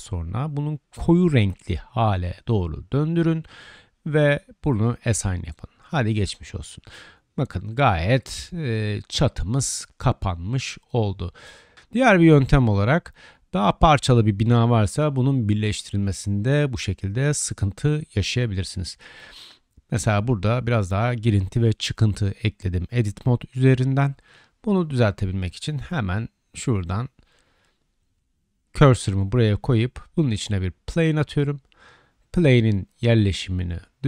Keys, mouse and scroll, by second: 0.8-3.3 drag, 7.7-9.2 drag, 8.3 Tab, 9.2 middle drag, 9.4-23.3 drag, 11.8 Tab, 13.1 right click, 16.0-17.1 right drag, 21.5 Tab, 22.4 Tab, 23.3-24.6 middle drag, 24.6 click, 24.9 Tab, 24.9-26.0 middle drag, 26.0 click, 26.1 middle click, 26.4-26.8 drag, 26.9-27.3 drag, 27.3-27.9 middle drag, 27.9-28.9 drag, 28.9-34.0 shift+middle drag, 29.7 shift+a.